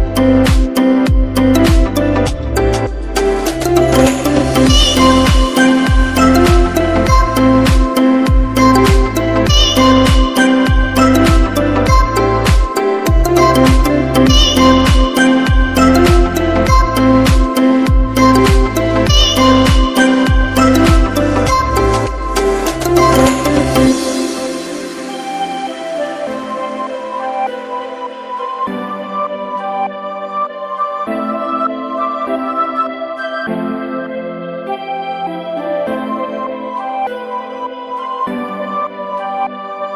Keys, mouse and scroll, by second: 1.9 click, 5.9 right click, 9.8 click, 13.6 right click, 15.2 click, 17.8 Delete, 20.7 click, 22.2 Delete, 24.4 click, 25.4 Delete, 27.2 click, 32.4 ctrl+Num_Lock, 34.7 click.